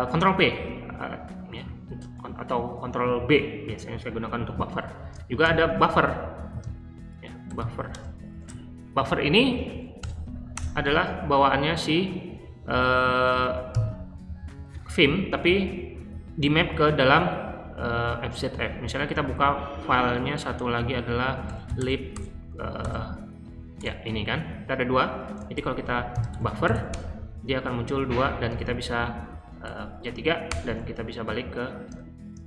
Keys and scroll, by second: 5.4 :, 6.4-8.0 typing, 9.9 BackSpace, 10.5 Return, 13.6 ctrl+g, 18.9-19.7 typing, 21.1-22.1 typing, 22.8 Tab, 23.7 Return, 25.5-29.6 typing, 28.1 Page_Down, 30.5 Return.